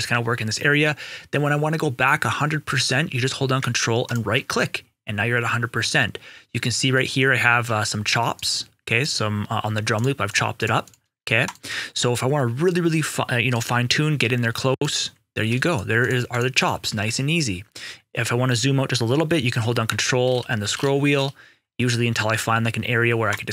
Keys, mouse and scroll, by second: 4.0 ctrl+right click, 6.8 ctrl+right click, 8.3 ctrl+right click, 9.9 ctrl+shift+click, 11.6 right click, 13.5 ctrl+right click, 15.6 ctrl+shift+click, 15.9 ctrl+shift+double click, 16.3 ctrl+shift+click, 20.2 ctrl+scroll down 1, 23.2 right click.